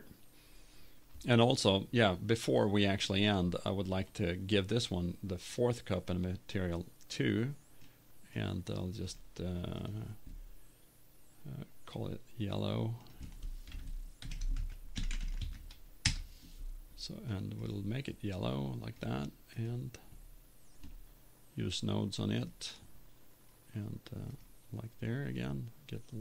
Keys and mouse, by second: 0.0-1.3 drag, 3.1 right click, 3.6-4.7 drag, 9.2 click, 12.0-16.1 drag, 18.4-20.7 drag.